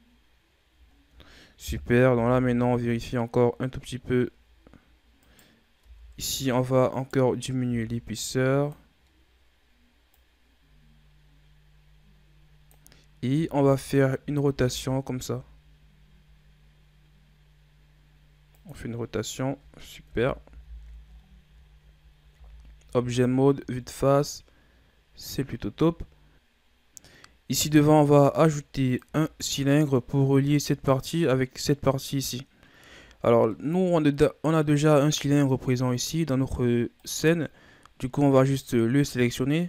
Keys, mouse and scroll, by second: 0.8 shift+scroll down 1, 1.6 KP_3, 2.0 z, 2.6-2.9 ctrl+scroll down 5, 2.9 scroll up 5, 4.1-5.1 ctrl+scroll up 4, 5.1 right click, 5.7 Tab, 6.8 right click, 7.5 b, 9.2 scroll up 2, 10.0-13.2 drag, 13.2 a, 13.5 a, 14.4 r, 20.0 KP_1, 20.4 z, 21.0-21.5 scroll down 5, 21.5-22.2 ctrl+scroll up 7, 22.2 Tab, 22.8 a, 23.1-23.9 scroll down 2, 23.9-26.3 middle drag, 26.3-26.6 shift+scroll down 2, 26.9-27.5 scroll up 3, 27.5-28.0 scroll down 3, 28.0-28.7 scroll up 4, 28.7 click, 29.1 shift+scroll up 1, 29.1 shift+scroll down 2, 29.3-30.1 middle drag, 30.1-30.8 shift+scroll down 3, 30.8 right click, 31.1-31.7 scroll up 2, 31.7 right click, 32.9-33.4 ctrl+scroll up 4, 33.4-35.0 middle drag, 35.0-35.5 scroll up 3, 35.5-36.9 middle drag, 36.9 right click, 37.5 scroll down 4.